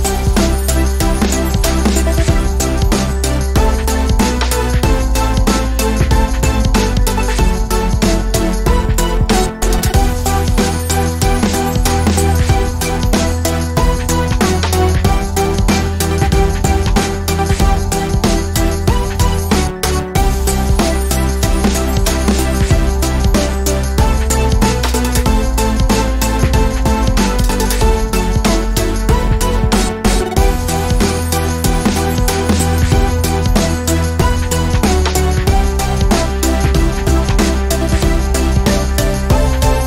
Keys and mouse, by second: 0.7-1.5 middle drag, 4.2 ctrl+j, 8.8-9.8 drag, 10.7 middle click, 11.5-13.4 drag, 13.8-14.9 drag, 14.9-15.6 middle drag, 21.4-22.1 middle drag, 22.1-25.0 drag, 25.0 middle click, 25.6 a, 26.6 shift+f, 27.1 middle click, 27.9 middle click, 32.0 middle click, 32.7 middle click, 35.5 middle click, 36.1 middle click, 36.6 middle click.